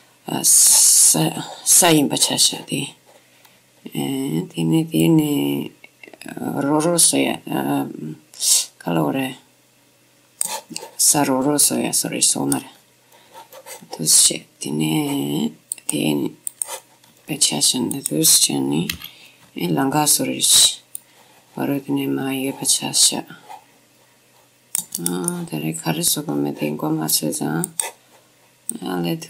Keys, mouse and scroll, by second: 2.1-5.1 scroll down 1, 5.1-6.8 drag, 5.1-6.0 scroll down 1, 11.3 middle click, 11.5-11.8 scroll up 1, 11.8-14.6 middle drag, 14.6-15.3 scroll up 1, 16.7 click, 17.2 middle click, 17.7 middle click, 18.1-22.4 drag, 19.1 c, 25.4-27.7 middle drag, 27.7-29.2 drag, 28.4 middle click.